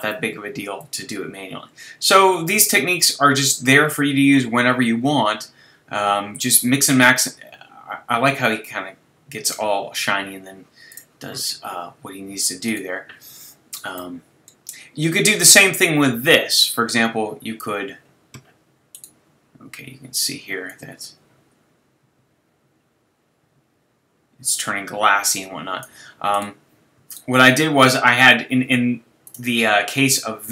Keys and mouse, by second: 12.7-14.0 drag, 16.5-18.4 drag, 18.9 right click, 19.3-20.7 middle drag, 20.7 click, 21.1 click, 21.2 middle click, 21.3 click, 21.4 middle click, 21.6 middle click, 22.0 click, 22.3 click, 26.4 right click, 27.1-29.3 right drag.